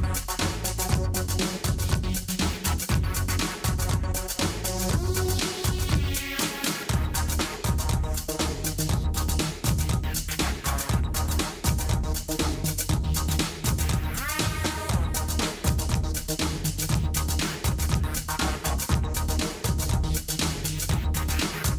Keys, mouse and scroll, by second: 1.0-2.2 drag, 1.4 h, 3.4 alt+h, 4.2 click, 4.7 middle click, 4.9 drag, 5.3 KP_1, 5.4 middle click, 5.6-6.1 middle drag, 6.4 click, 6.9 Tab, 7.1-7.8 middle drag, 7.8 click, 8.0 middle click, 8.9 click, 10.7 click, 13.2 a, 14.3 click, 16.2 g, 18.2 s, 20.0 s.